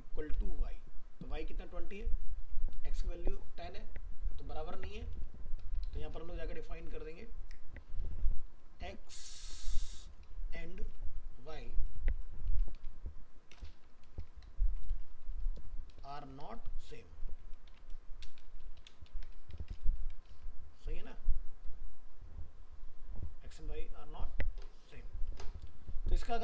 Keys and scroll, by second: 20.3 ctrl+s, 21.0 alt+Tab, 24.9 alt+Tab.